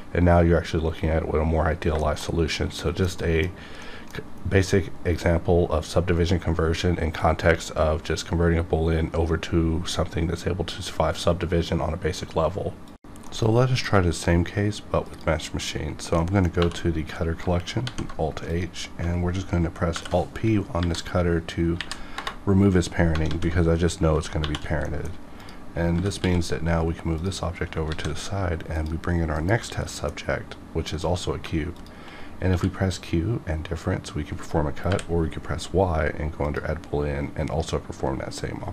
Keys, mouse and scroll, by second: 1.3-1.7 scroll down 2, 2.0 shift+middle click, 2.2 shift+scroll down 1, 2.5 middle click, 3.2 middle click, 3.8 middle click, 15.1 click, 16.2 middle click, 16.5 2, 17.7 alt+h, 18.4 click, 19.9 alt+p, 20.7 Down, 21.7 Up, 22.1 Return, 23.2 alt+a, 24.3 shift+1, 24.8 middle click, 25.4 click, 25.7 scroll down 1, 25.9 g, 26.2 x, 27.2 click, 27.8 shift+a, 28.7 click, 29.3 KP_Decimal, 29.8 scroll up 1, 29.9 middle click, 30.8 click, 30.9 click, 31.7 shift+click, 31.9 shift+click, 32.4 q, 35.2 y, 36.3 click, 38.6-38.7 scroll down 2.